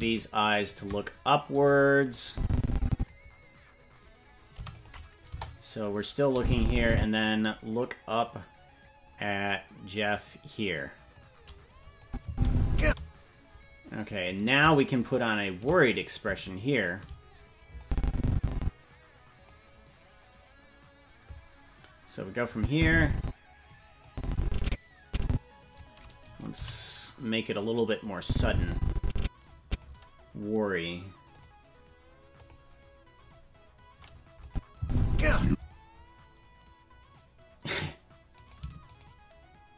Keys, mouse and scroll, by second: 0.7 shift+right click, 2.3 click, 4.5 i, 5.3 KP_0, 6.3-7.3 drag, 8.2-9.3 drag, 10.1-11.2 drag, 12.0 click, 12.2 space, 12.8 space, 14.5 right click, 15.2 shift+right click, 16.1 right click, 16.7 shift+right click, 17.8-19.5 drag, 22.5-23.7 drag, 24.0-25.8 drag, 26.2 right click, 26.5 g, 28.2-29.8 drag, 31.4 click, 32.4 click, 34.4 click, 34.8 space, 35.4 space, 38.5 right click.